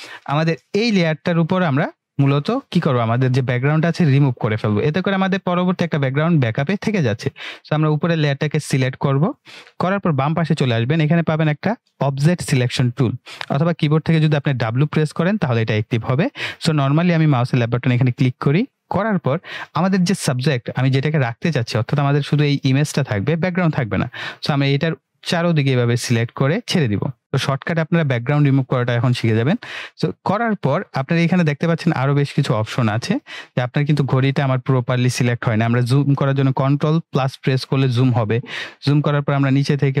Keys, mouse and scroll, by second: 1.1 click, 5.7 click, 17.7 click, 25.2-26.8 drag, 36.7 ctrl+Num_Lock, 37.3 ctrl+=, 39.7-40.0 drag.